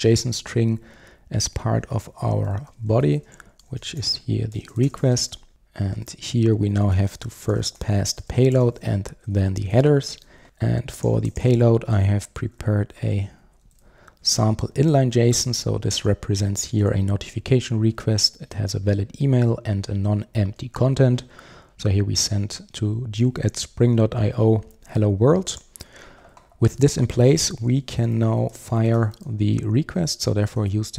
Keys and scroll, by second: 5.5 Return, 9.3 Return, 12.6 super+v, 30.7 Return.